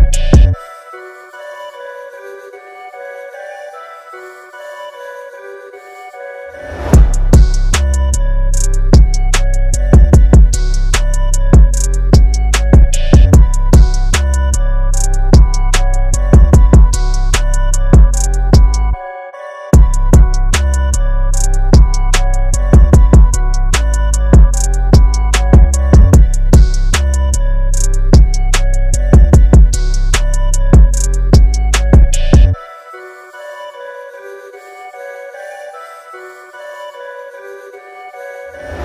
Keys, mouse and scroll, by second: 8.0 click, 10.3 ctrl+z, 10.8 click, 13.7 click, 16.4 space, 16.7 click, 16.7 space, 19.3 click, 21.7 click, 25.1 click, 26.1 scroll up 1, 35.0 click, 35.4-36.3 scroll up 1, 37.5-38.8 scroll down 1.